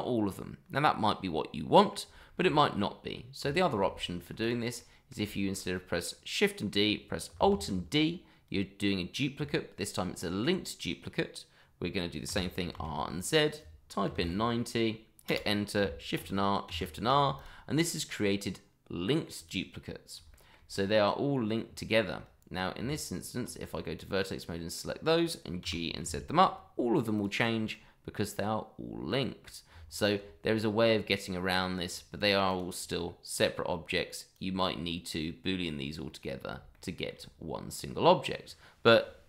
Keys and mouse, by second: 2.2 shift+middle drag, 2.5 middle drag, 3.4 Tab, 4.0 shift+middle click, 4.4 click, 4.8 middle click, 5.3 shift+middle drag, 5.7 middle click, 7.5 alt+d, 12.3 r, 12.7 z, 14.0 KP_9, 14.1 KP_0, 15.3 Return, 16.1 shift+r, 17.3 click, 17.8-19.1 middle drag, 19.3 click, 20.3 shift+middle drag, 22.8 Tab, 24.0-24.4 drag, 24.7-25.2 middle drag, 25.6 g, 26.0 z, 27.1 click, 27.7-29.4 middle drag, 29.7 Tab, 30.8-31.5 middle drag, 31.8 click, 32.2 drag, 32.5 click, 32.7 click, 34.3 click, 36.7-37.1 shift+middle drag.